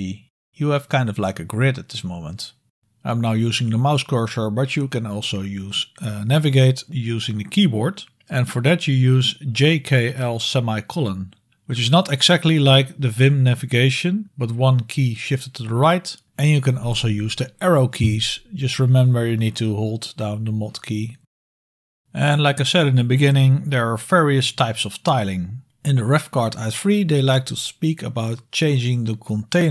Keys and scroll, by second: 5.3-7.9 typing, 9.8 super+l, 10.4 super+l, 11.6 super+l, 13.8 super+k, 14.3-15.1 typing, 15.2 super+k, 16.5 super+k, 18.1 super+l, 18.8 super+l, 19.3 super+;, 21.7 super+Up, 21.7 super+Down, 21.7 super+End, 21.7 super+Right, 23.0 super+Left, 23.7 super+Up, 24.6 super+Down, 25.4 super+Right, 26.1 super+Down.